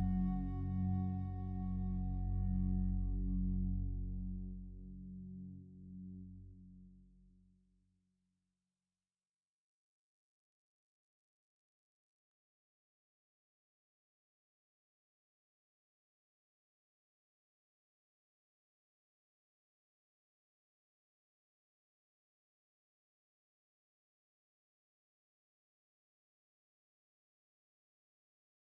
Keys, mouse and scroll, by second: 0.8 click, 3.6 a, 3.8 a, 5.1 alt+shift+right click, 5.9 g, 6.1 g, 9.0 click, 10.2 a, 11.3 a, 11.7 alt+shift+right click, 13.8 alt+shift+right click, 16.4 g, 16.5 g, 18.6 right click, 24.3 a, 24.5 a, 26.3 Tab, 27.0-27.7 scroll down 1, 27.9-28.6 alt+drag.